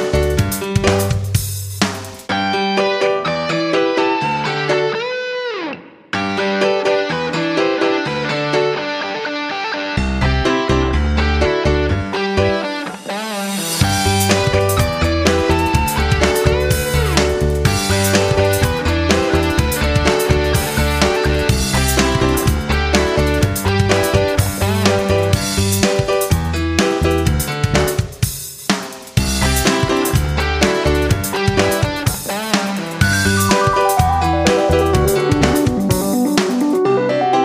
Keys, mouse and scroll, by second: 24.2 Right, 24.4 Right, 24.5 Right, 24.7 Right, 25.0 Right, 32.7 F9, 33.6 F9, 34.4-37.4 drag.